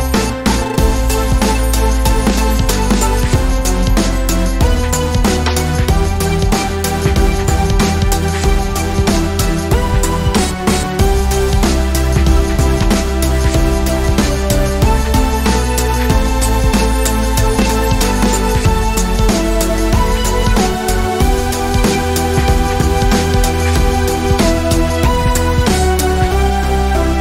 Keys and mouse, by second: 3.4 click, 7.7 shift+d, 12.0 x, 13.1-15.0 drag, 14.6 alt+d, 16.6-17.6 drag, 17.9 right click, 19.1 m, 22.7-23.5 drag, 23.5-24.6 right drag, 24.6-25.6 middle drag.